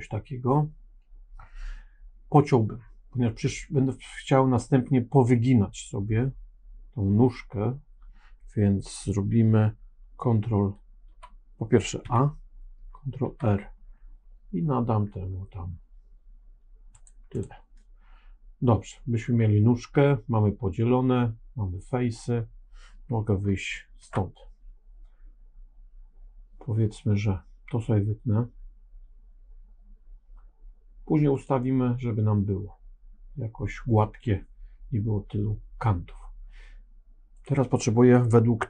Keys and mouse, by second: 11.9 a, 13.1 ctrl+r, 23.9 ctrl+Tab, 31.2 click, 37.3 click.